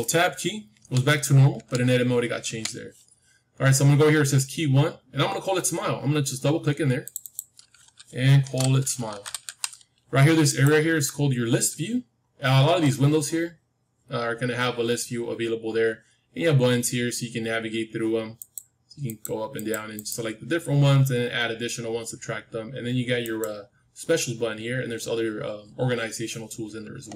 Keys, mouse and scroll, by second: 0.7 Tab, 1.5 Tab, 2.4 Tab, 6.9-10.4 drag, 12.3-14.4 middle drag, 18.3-21.9 drag, 23.1-25.9 drag.